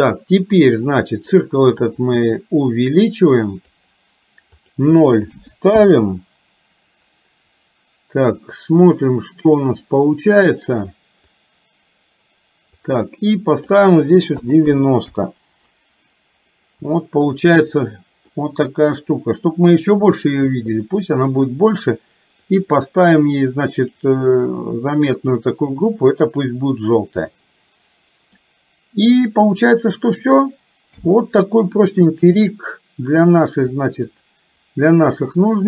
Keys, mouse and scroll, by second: 2.1-3.7 drag, 9.0 middle click, 11.3-15.2 drag, 17.0-18.3 middle drag, 17.0-18.2 scroll up 1, 18.2 scroll up 1, 19.2-20.8 drag, 20.8-22.6 middle drag, 22.6 click, 24.0-25.5 drag, 26.3 click, 27.2-28.5 middle drag, 31.0 n, 34.0-35.6 drag.